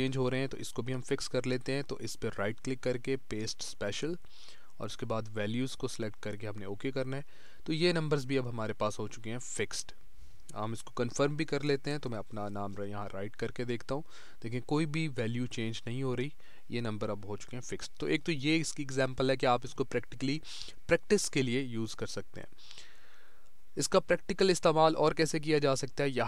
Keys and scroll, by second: 17.7 Delete.